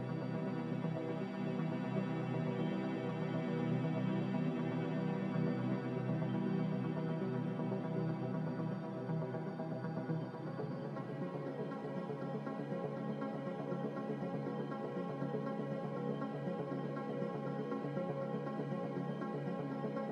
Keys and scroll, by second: 0.8-1.7 typing, 15.5-16.4 typing.